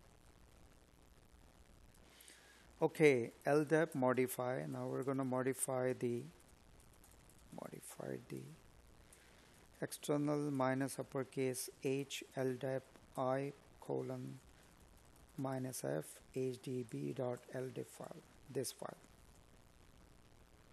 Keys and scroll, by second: 2.6 space, 8.1 space, 8.6 space.